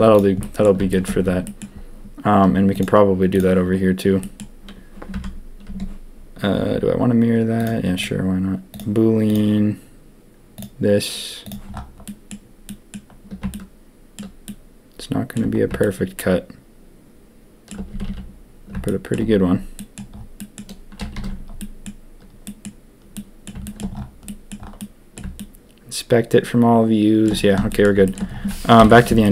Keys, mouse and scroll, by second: 0.4 drag, 0.9 shift+click, 1.4 drag, 2.7 click, 3.3 click, 4.2 click, 5.1 Tab, 5.6 Tab, 7.5 click, 8.6-10.6 drag, 12.0 click, 12.6 click, 13.5-14.1 shift+drag, 14.4-15.3 shift+drag, 15.8 shift+middle click, 16.2 shift+click, 17.9 a, 18.0 a, 18.8 shift+drag, 19.7 middle click, 20.3 middle click, 21.1 ctrl+s, 21.5 middle drag, 22.4 drag, 23.1-23.4 drag, 23.6 shift+middle drag, 24.2 middle drag, 24.7 middle click, 25.3-27.2 shift+middle drag, 27.6 middle drag, 28.0 shift+middle drag, 28.7 ctrl+KP_3.